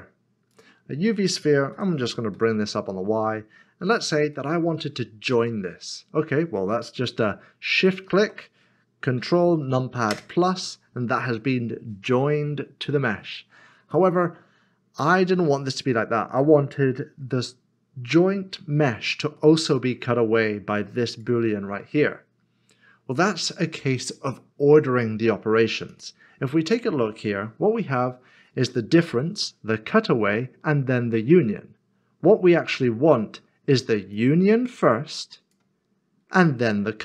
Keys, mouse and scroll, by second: 0.5 click, 2.3 typing, 3.9 click, 4.3 middle click, 10.1 ctrl+KP_Add, 13.9 ctrl+KP_Add, 14.1 middle click, 19.4 middle click, 21.0 click, 25.9 click, 34.1 click.